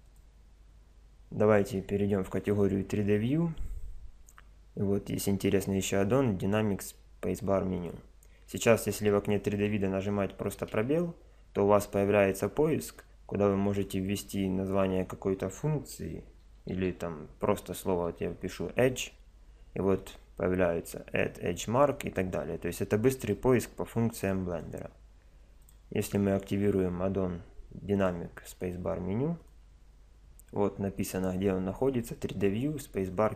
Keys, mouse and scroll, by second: 10.6 space.